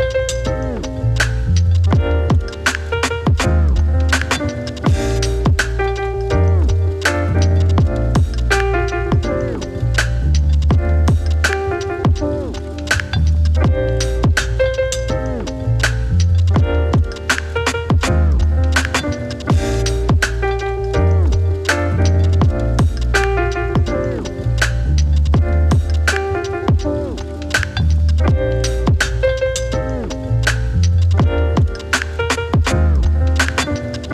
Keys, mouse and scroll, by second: 4.1 click, 5.3 space, 6.8 click, 7.0 n, 21.0-23.7 drag, 26.7 scroll down 1, 27.4-27.9 scroll up 1, 28.3-30.2 drag, 31.3 s, 32.5-34.1 drag.